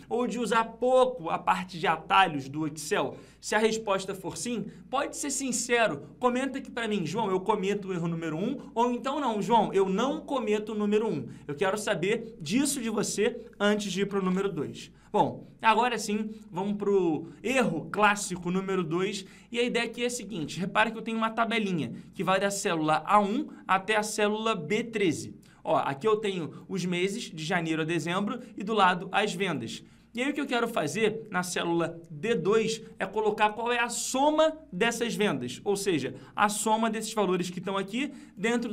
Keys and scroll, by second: 14.2 ctrl+Page_Down.